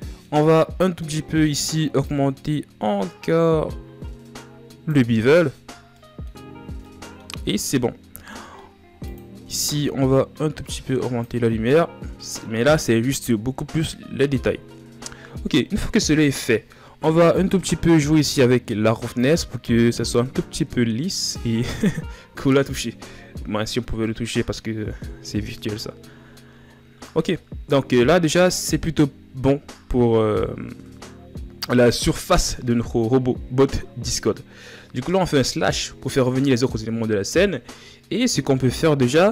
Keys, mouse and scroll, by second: 3.0-5.6 shift+drag, 5.6-6.1 scroll down 4, 6.1-7.6 middle drag, 7.6 scroll up 3, 8.1 scroll down 2, 8.8-10.4 drag, 11.8 scroll down 5, 17.5-19.2 middle drag, 19.2-23.5 drag, 34.0 KP_Divide.